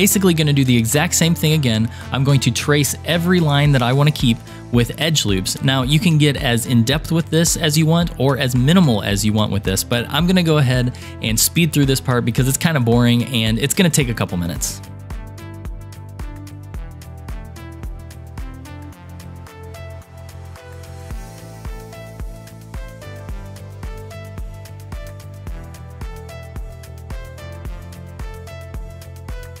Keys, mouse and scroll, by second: 14.8 Tab, 14.8 click, 15.0 ctrl+r, 15.1 ctrl+r, 15.3 scroll up 4, 15.3 shift+middle click, 15.6 ctrl+r, 16.3 ctrl+r, 16.6 ctrl+r, 16.9 ctrl+r, 17.0 ctrl+r, 17.2 ctrl+r, 17.4 ctrl+r, 17.7 ctrl+r, 17.7 scroll down 4, 17.8 shift+middle click, 17.9 ctrl+r, 18.4 shift+middle click, 18.4 scroll up 4, 18.5 ctrl+r, 18.9 shift+middle click, 19.0 ctrl+r, 19.2 ctrl+r, 19.5 ctrl+r, 19.6 ctrl+r, 19.7 ctrl+r, 20.0 ctrl+r, 20.2 ctrl+r, 20.7 shift+middle click, 20.7 ctrl+r, 21.2 ctrl+r, 21.4 ctrl+r, 21.7 shift+middle click, 21.8 ctrl+r, 22.0 ctrl+r, 22.4 g, 22.6 ctrl+r, 22.9 shift+middle click, 23.0 ctrl+r, 23.4 ctrl+r, 23.6 ctrl+r, 24.0 shift+middle click, 24.0 ctrl+r, 24.6-29.6 typing, 24.7 click, 24.8 shift+click, 25.5 click, 26.1 click, 26.4 ctrl+z, 26.5 click, 27.1 shift+click, 27.3 shift+click, 28.0 click, 28.2 click, 28.2 shift+click, 28.5 shift+click, 29.1 shift+click, 29.4 shift+middle click.